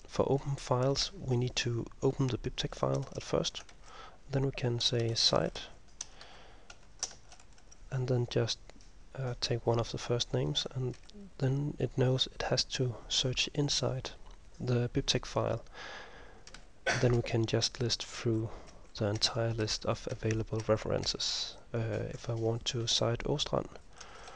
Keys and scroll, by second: 3.9 \, 5.0-7.2 typing, 6.8 Delete, 11.1 ctrl+m, 16.6 ctrl+m, 17.3 ctrl+m, 17.7 ctrl+m, 18.3 ctrl+m, 24.1-24.3 typing.